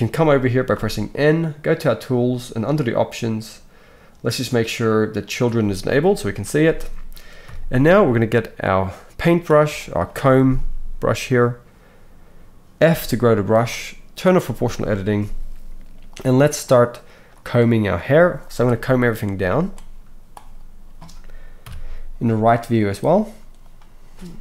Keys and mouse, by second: 0.7 n, 1.8-2.8 middle drag, 2.8-5.3 drag, 7.4 KP_1, 12.9 f, 14.4 click, 15.9 middle click, 16.1-24.4 drag, 21.6 KP_3.